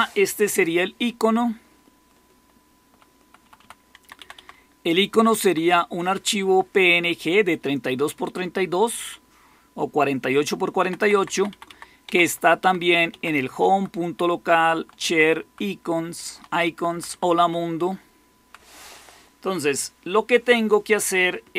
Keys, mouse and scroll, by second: 1.3 Right, 1.8 Right, 1.8-2.8 Right, 3.2 Right, 3.3 Right, 3.9 Left, 4.1 Left, 4.3 Left, 4.4-5.4 Left, 10.7 Left, 10.9 Left, 11.1 Left, 11.2 Left, 11.4 Left, 12.0 Left, 12.5 Left, 13.6 Right, 13.8-14.9 Right, 15.5 Right, 16.0 Right, 16.2 Right, 16.6 Right, 16.8 Right, 17.0 Right, 17.4-18.4 Right.